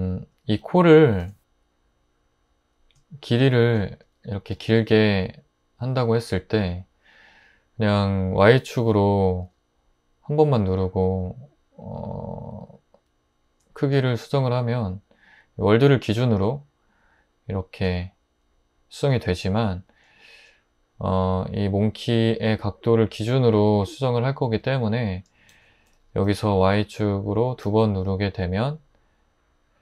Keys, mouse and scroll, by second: 0.6 3, 3.8 `, 4.6 g, 9.4 y, 25.5 super+z, 26.4 g, 27.0 y, 27.6 y.